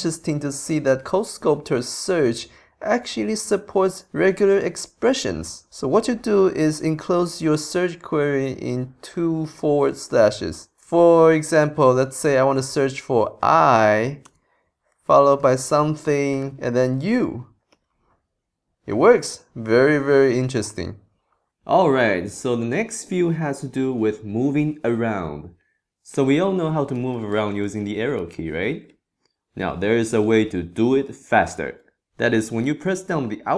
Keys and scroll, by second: 26.9 Up, 27.6 Down, 28.2 Left, 28.9 Right, 30.3 Left.